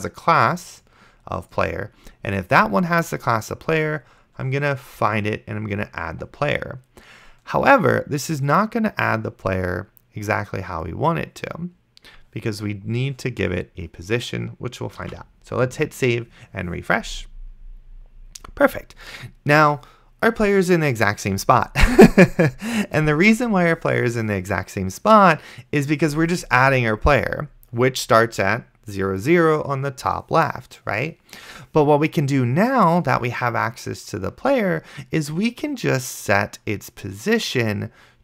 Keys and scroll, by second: 15.3 ctrl+s.